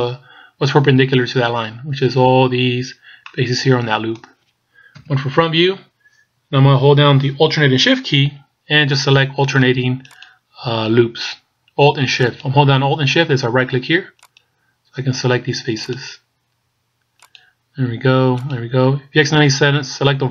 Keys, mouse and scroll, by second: 3.3 middle click, 4.9 KP_1, 10.1 alt+shift+right click.